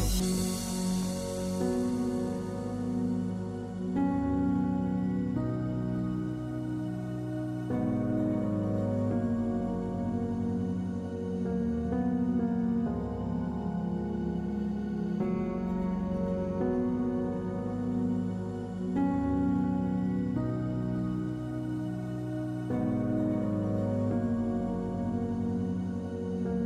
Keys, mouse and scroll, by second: 0.0 click, 0.4 Tab, 3.4 Tab, 6.4 Tab, 11.0 click, 12.4-13.8 middle drag, 16.4-17.6 middle drag, 25.1 f.